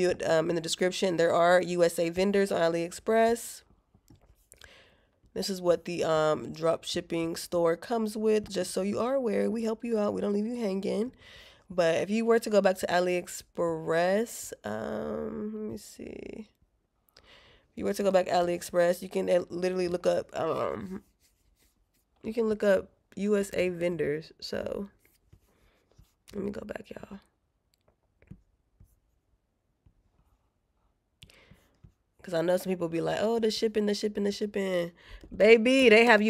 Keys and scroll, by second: 15.4 alt+q, 29.1 alt+q.